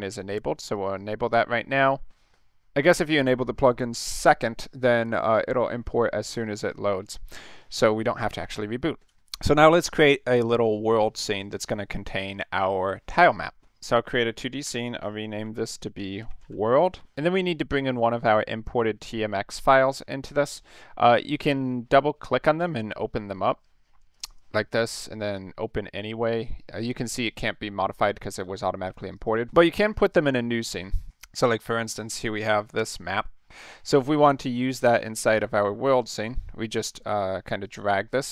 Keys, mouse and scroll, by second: 0.7 click, 4.9 click, 14.6 F2, 15.3-16.8 typing, 17.0 Return, 24.1 click, 24.3 click, 29.1 click, 29.9-30.8 middle drag, 31.1 middle click, 31.5 middle click, 32.0 middle click, 32.4 middle click, 33.1 middle click, 35.2 click, 37.6-38.3 drag.